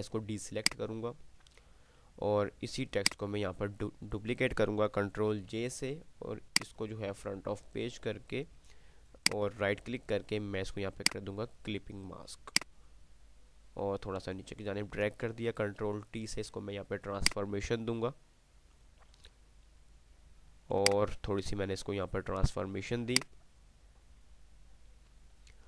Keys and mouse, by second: 0.8-3.2 drag, 5.5 ctrl+j, 6.5 click, 9.5 right click, 11.2-14.8 drag, 16.0 ctrl+shift+t, 17.5-18.8 alt+shift+drag, 23.3-25.6 drag.